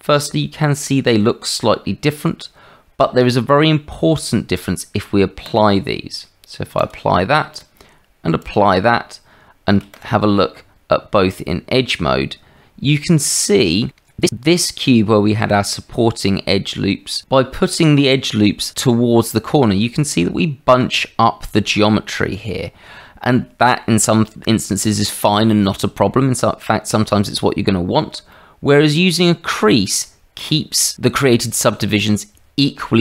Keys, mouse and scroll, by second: 5.4 click, 6.7 click, 7.5 click, 8.4 click, 9.9 shift+click, 10.5 Tab, 13.4 shift+middle click, 28.3 shift+middle click, 30.1 middle click.